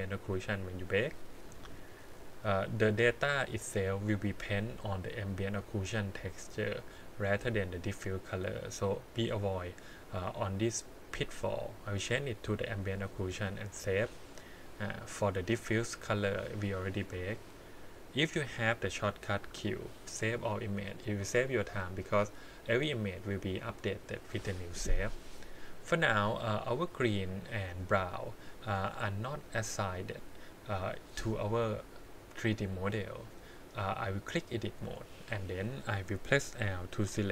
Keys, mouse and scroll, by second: 0.6 click, 7.5 click, 9.2 click, 10.7-11.9 drag, 12.5 click, 15.3 click, 16.2 click, 19.4 q, 22.0 click, 26.9 click, 27.5-28.0 scroll up 5, 32.4 middle click, 33.8 click, 35.3 click, 37.0 l.